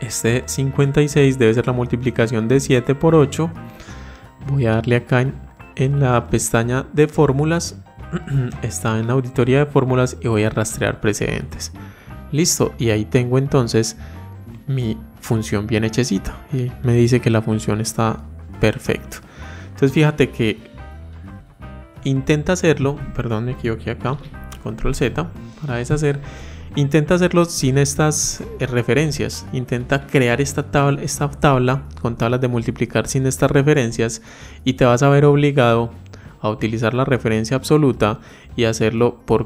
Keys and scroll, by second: 23.9 ctrl+z.